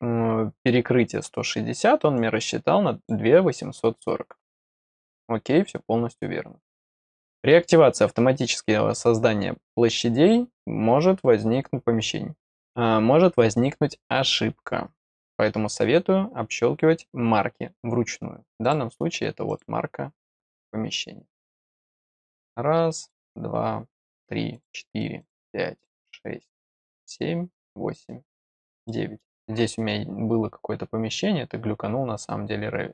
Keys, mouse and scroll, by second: 2.1 click, 18.6 click, 19.4 click, 22.0 click, 22.9 click, 23.9 click, 24.5 click, 25.1 click, 25.7 click, 26.8 click, 27.5 click, 28.4 click, 28.8 middle click.